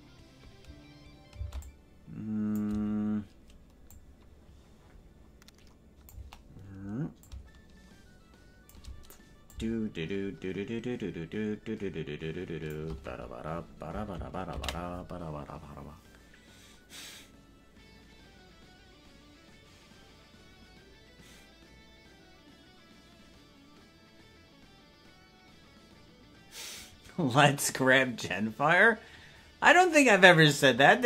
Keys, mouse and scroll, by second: 1.5 space, 1.7-2.7 drag, 4.0-6.2 drag, 7.2-8.8 shift+drag, 9.5-12.8 drag, 17.9 ctrl+s.